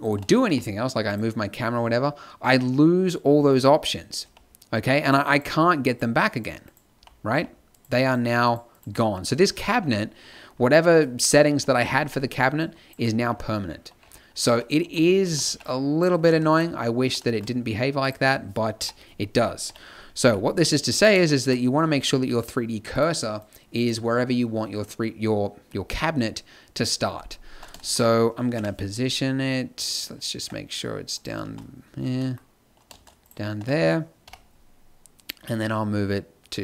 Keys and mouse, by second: 0.4 g, 4.2 n, 4.8 n, 6.9 n, 7.3 n, 9.4 z, 11.5 n, 12.0 n, 12.2 b, 13.1 z, 14.8 n, 15.3 n, 15.5 b, 16.2 x, 18.9 KP_7, 19.8 KP_5, 20.2 g, 28.5 KP_1, 30.3 Tab, 31.4 shift+s, 32.9 shift+s, 33.5 Tab, 34.2 KP_7.